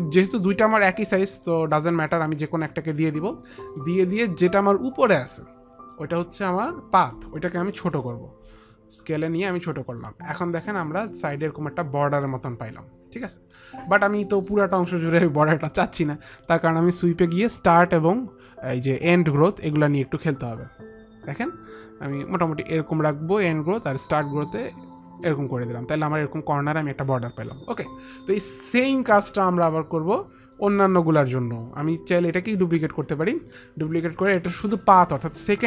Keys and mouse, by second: 1.3 ctrl+click, 2.2 ctrl+click, 4.5 ctrl+click, 8.0 t, 8.8 click, 20.2 click, 24.2 click, 32.7 ctrl+click, 34.7 ctrl+click.